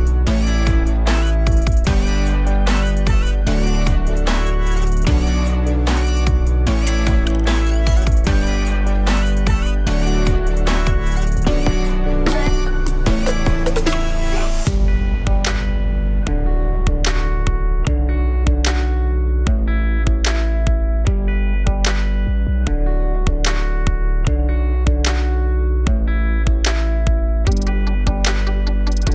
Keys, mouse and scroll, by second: 2.4 click, 4.7-13.9 middle drag, 13.9 click, 16.2-18.8 drag, 20.8 click, 21.4-23.4 drag, 23.4 scroll up 2, 25.3 click, 25.8 click, 26.9 KP_Divide, 27.5-27.8 scroll down 2, 27.8 alt+click, 28.7 shift+d.